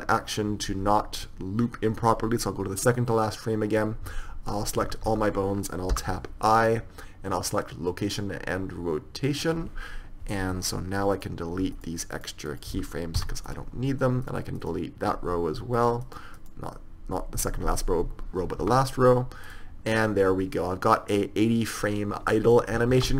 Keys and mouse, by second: 1.5-3.3 drag, 5.3 a, 5.4 a, 13.9-19.9 drag, 13.9 x, 19.9 x, 20.3 click.